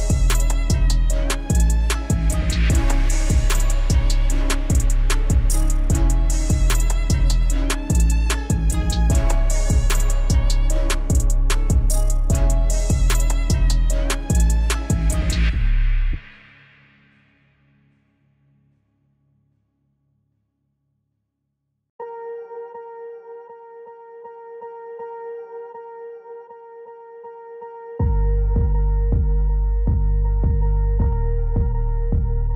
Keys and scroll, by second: 30.5 ctrl+z.